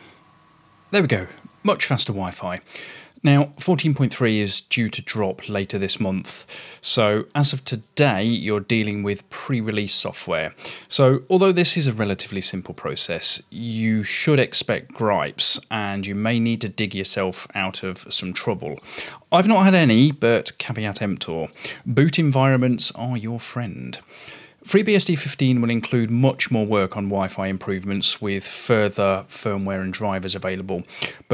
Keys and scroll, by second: 1.1 Return, 1.3-1.8 typing.